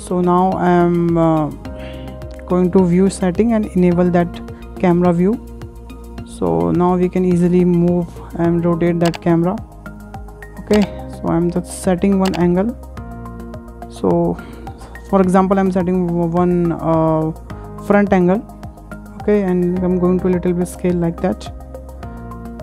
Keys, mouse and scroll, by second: 1.9 click, 2.6 click, 4.3 click, 4.8 n, 5.0 n, 6.0-15.9 shift+middle drag, 15.9 click, 17.8 click, 19.7 s, 22.2 KP_0.